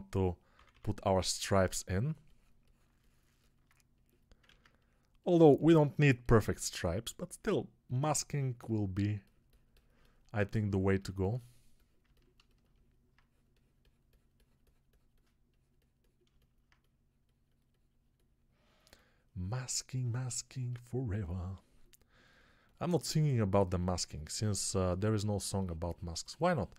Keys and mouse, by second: 0.4 ], 0.6 ], 3.2 alt+click, 3.2 alt+middle click, 3.2 alt+right click, 4.3 ctrl+z.